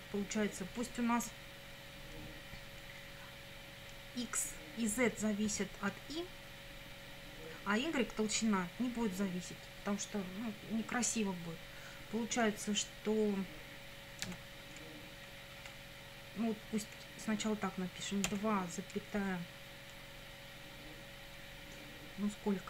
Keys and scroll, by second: 14.3 2, 18.3 ,.